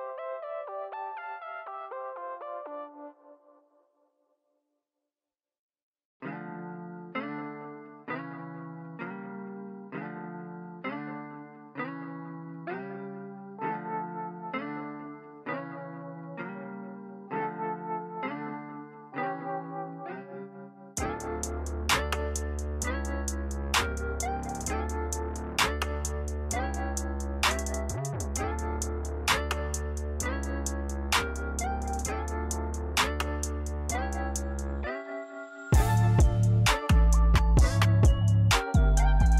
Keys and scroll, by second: 0.8 typing, 6.1 8, 6.5 Return, 6.5 0, 18.7-19.8 typing, 24.3 0, 29.3-30.6 typing, 32.9 f, 34.5-35.4 typing.